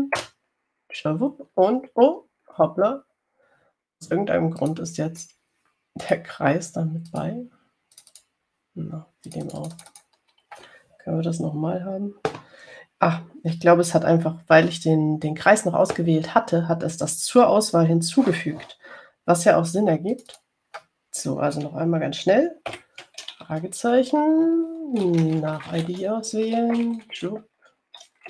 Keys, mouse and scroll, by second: 0.0-1.1 typing, 1.4 Return, 5.9 click, 7.3 click, 8.3 click, 9.2 click, 10.5 click, 21.3 click, 23.9 shift+ß, 26.3-27.5 typing.